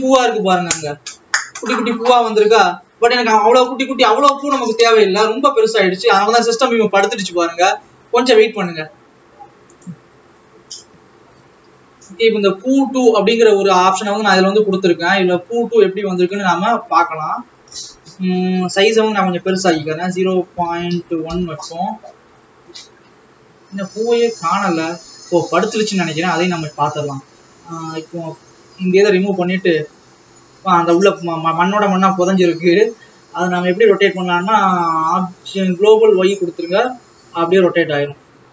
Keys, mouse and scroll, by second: 10.7 Tab, 11.6 alt+a, 13.2 click, 16.9 click, 28.6 click, 30.3-31.4 scroll down 1, 36.2-37.7 drag, 37.7 scroll up 2.